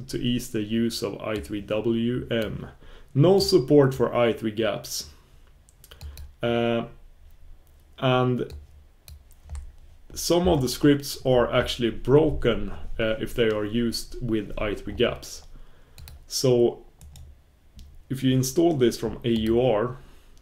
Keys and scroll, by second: 19.5 super+b.